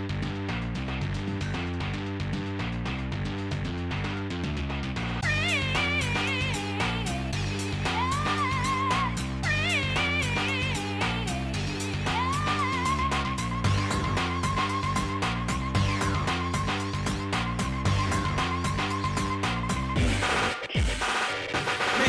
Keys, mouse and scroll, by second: 2.2 s, 4.9 ctrl+z, 6.3 space, 14.6 shift+middle click, 15.5 shift+middle click, 16.1 scroll up 2, 16.6 scroll down 2, 17.5 click, 18.4 shift+click, 19.3 click, 19.9 shift+click, 21.1 g.